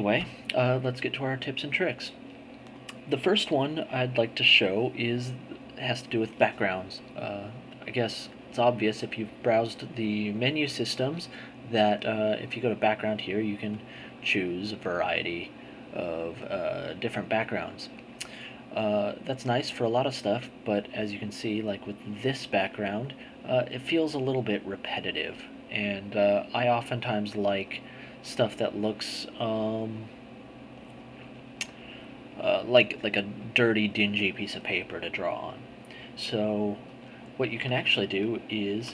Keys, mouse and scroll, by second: 12.2 click, 13.8 click, 14.5 click, 16.0 click, 17.0 click, 18.1 click, 20.5-21.9 drag, 22.1 click, 28.2 click, 29.9 click, 31.7 click, 36.8 click.